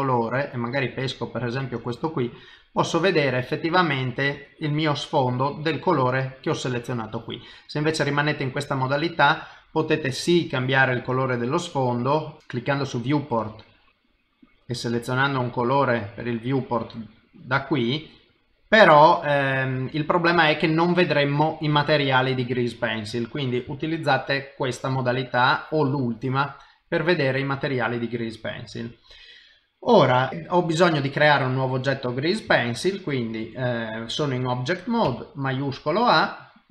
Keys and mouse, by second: 3.4 middle click, 7.8 click, 8.8 middle click, 10.3 click, 18.0 middle click, 20.3 middle click, 23.2 click, 23.7 shift+middle click, 25.0 middle click, 26.0 click, 26.9 click, 27.4 middle click, 28.6 middle click, 30.7 middle click, 32.0 middle click, 35.0 shift+a.